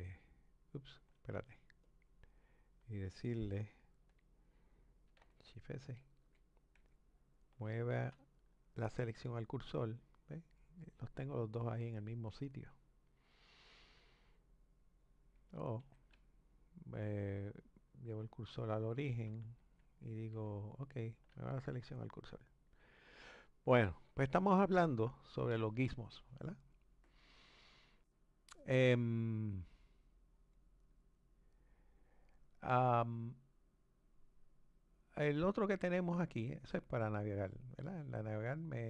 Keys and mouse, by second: 6.0 shift+s, 6.8 shift+s, 15.8 shift+s, 18.0 click, 19.6 shift+s, 20.3 shift+s, 30.8 click, 33.8 click.